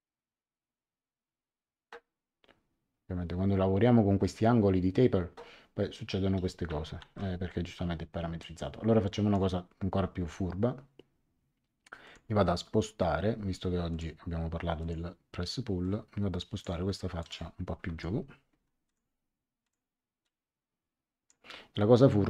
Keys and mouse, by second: 7.0 ctrl+z, 8.4 click, 12.0 click, 13.9 click, 17.2 click, 17.8 Escape, 18.8 click.